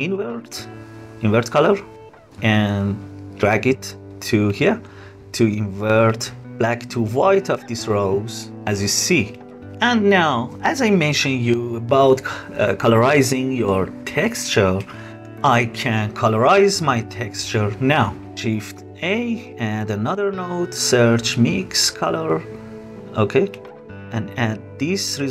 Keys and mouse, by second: 9.4 click, 10.9 space, 12.4 space, 13.1-14.2 drag, 14.6 click, 18.6 shift+a, 23.7-25.3 drag.